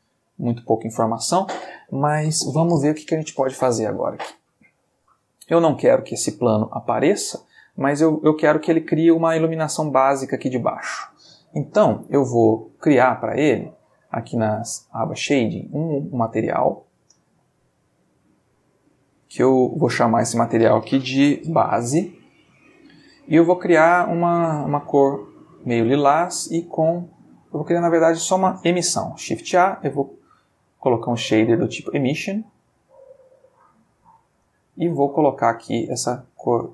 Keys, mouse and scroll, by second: 7.3 click, 13.8 click, 15.6 click, 19.1 click, 20.1 click, 21.3 shift+b, 21.5 shift+a, 21.6 shift+s, 21.7 shift+e, 21.9 shift+Return, 23.9 click, 24.7-26.0 drag, 27.5 click, 27.8 x, 28.7 shift+a, 32.1 click, 32.8 click, 33.5-34.5 drag, 34.8 click, 35.5-36.7 drag.